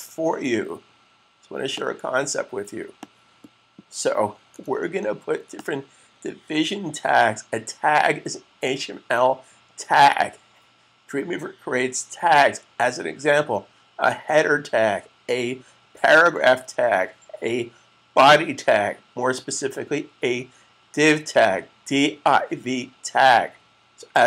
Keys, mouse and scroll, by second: 1.6 click, 5.4 click.